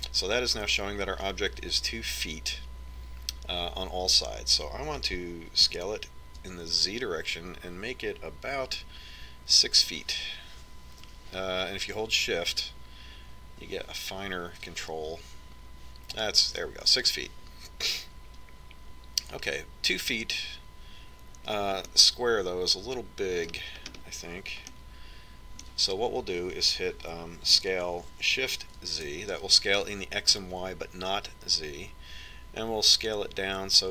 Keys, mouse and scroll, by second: 7.0 s, 23.3-25.0 middle drag, 25.2-26.1 scroll up 1, 26.1-28.0 middle drag, 28.8 s.